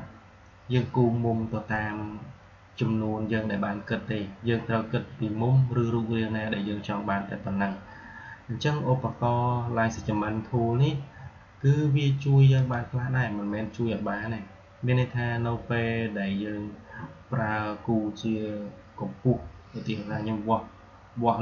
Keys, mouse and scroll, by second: 12.4 click.